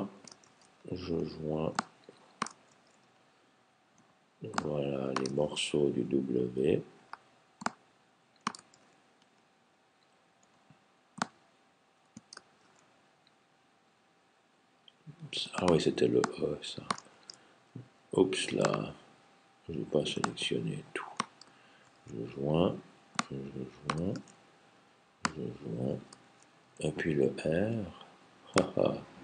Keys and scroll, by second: 0.4 super+j, 2.5 super+j, 5.4 super+j, 8.6 super+j, 12.4 super+j, 17.0 super+j, 21.7 super+j, 24.0 super+j, 26.1 super+j.